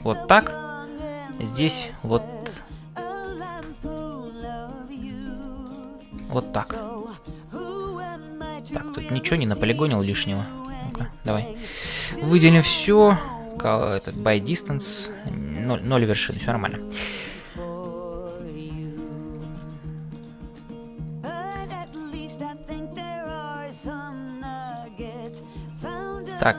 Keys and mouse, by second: 0.0-26.5 typing, 1.3 click, 2.9 middle click, 3.8 ctrl+z, 5.2 ctrl+z, 5.7 click, 6.8 middle click, 7.7-10.5 middle drag, 16.9 shift+middle click, 18.5 click, 20.5-21.7 middle drag, 21.9 click.